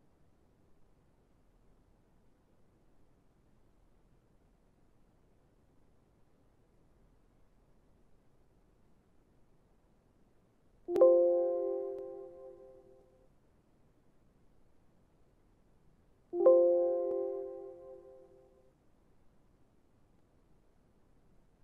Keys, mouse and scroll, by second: 2.8 middle click, 16.8 middle click, 16.8 right click, 19.4 right click.